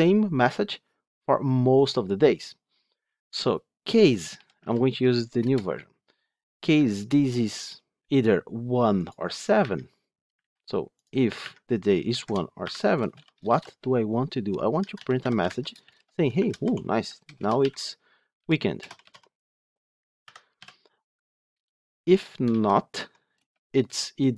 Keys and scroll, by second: 5.3 Return, 10.3 ctrl+z, 15.4 Tab.